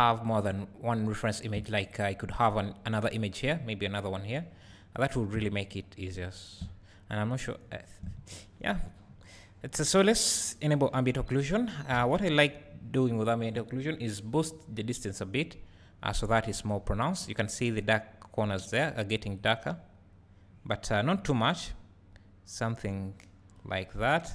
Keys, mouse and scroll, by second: 9.7 `, 12.0 alt+a, 13.0 click, 15.4-24.3 drag.